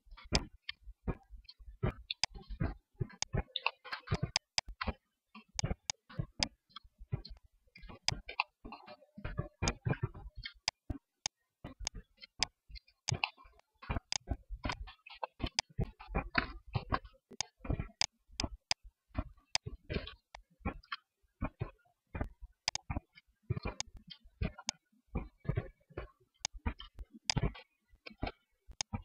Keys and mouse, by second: 0.2 Tab, 1.0 Tab, 1.9 Tab, 6.1 Tab, 6.7 Tab, 7.3 Tab, 8.2 middle click, 8.8 ctrl+r, 9.9 ctrl+Tab, 11.7 Tab, 12.2 Tab, 14.2 ctrl+s, 14.9 Tab, 15.9 KP_1, 16.6 Tab, 18.7 Tab, 19.7 Tab, 20.5 Tab, 21.7 Tab, 22.7 Tab, 23.4 Tab, 23.7 Tab, 25.3 click, 25.7 Tab, 26.4 Tab, 26.4 click.